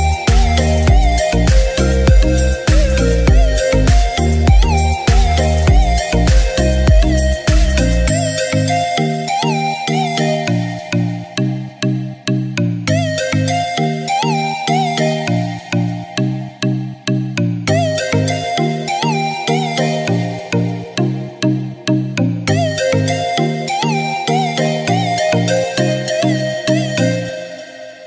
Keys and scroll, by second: 1.8 ctrl+shift+a, 11.1 ctrl+-, 12.9 ctrl+-, 13.2 ctrl+-.